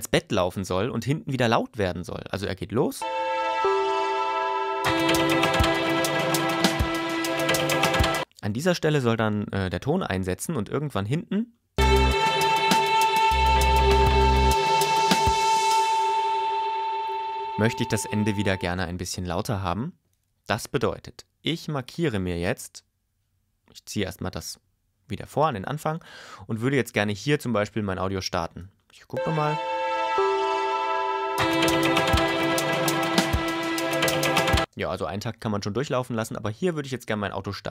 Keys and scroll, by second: 3.0 space, 8.2 space, 11.7 space, 18.6 space, 29.1 space, 34.6 space.